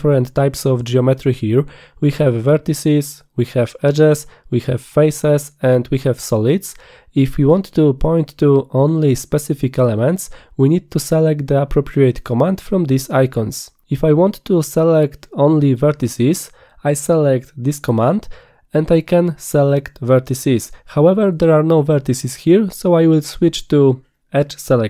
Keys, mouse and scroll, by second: 13.3 click, 13.9 click, 14.4 click, 14.8 click, 16.3 click.